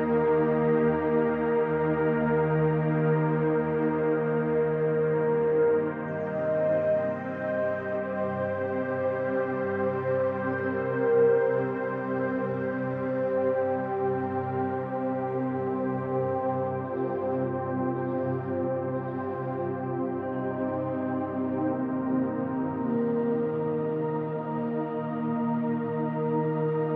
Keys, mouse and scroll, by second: 0.1 scroll up 2, 0.9 shift+click, 1.4-2.7 middle drag, 1.8 scroll down 2, 2.3 scroll down 2, 2.7 click, 3.4 l, 4.8 shift+h, 5.2 middle click, 5.5-5.9 scroll up 2, 5.9 click, 6.1 middle click, 6.7 click, 7.0-8.6 middle drag, 8.6 ctrl+click, 9.2 scroll down 1, 9.3 middle click, 9.9 click, 10.9-15.0 middle drag, 11.9 ctrl+z, 13.0 scroll up 1, 14.3 scroll up 1, 15.0 click, 15.3 middle click, 16.0 click, 16.4-20.5 middle drag, 17.2-17.7 scroll up 2, 20.5 click, 20.7-22.5 middle drag, 22.5 click, 23.4 scroll down 1, 23.6-24.6 shift+middle drag, 24.6 click, 24.9-26.9 shift+middle drag, 25.4-26.4 scroll up 1.